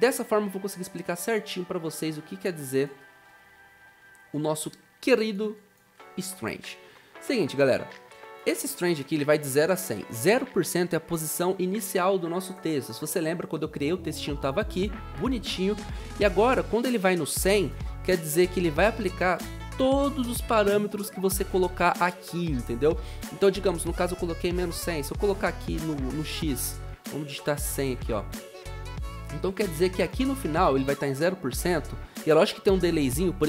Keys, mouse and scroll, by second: 27.3-28.3 typing.